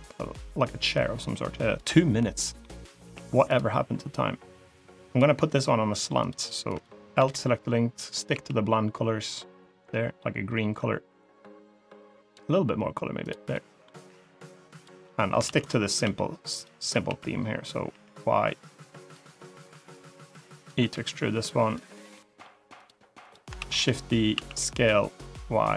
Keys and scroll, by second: 2.9 s, 5.2 e, 7.0 l, 8.2 g, 15.3 shift+d, 15.9 s, 16.9 s, 20.8 e, 23.4 shift+d, 24.2 s.